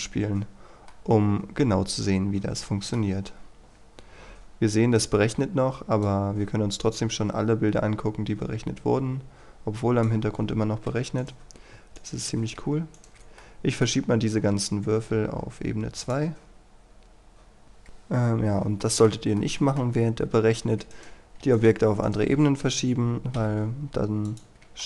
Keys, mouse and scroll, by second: 1.1-3.2 middle drag, 6.2-11.2 drag, 11.4 right click, 12.2 shift+right click, 13.2 shift+right click, 13.6 middle click, 15.3 m, 16.2 click, 17.6 F9, 18.1-18.5 scroll up 1, 18.5 scroll down 1, 18.9 shift+middle click, 20.9 right click, 21.6 shift+right click, 22.1 shift+right click, 23.4 m, 24.3 click, 24.5 scroll up 1.